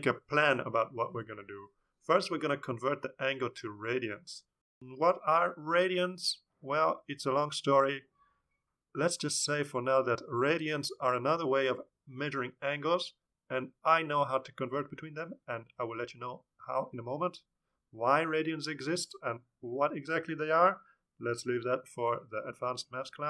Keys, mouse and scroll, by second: 0.1 Tab, 0.8-5.3 typing.